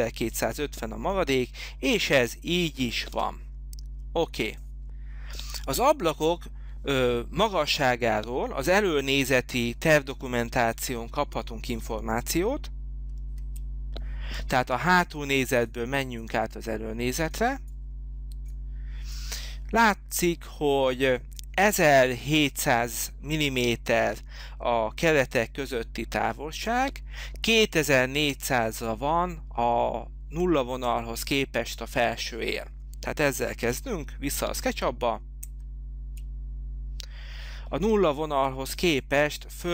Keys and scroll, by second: 3.4 Escape, 13.5 alt+Tab, 35.6 alt+Tab.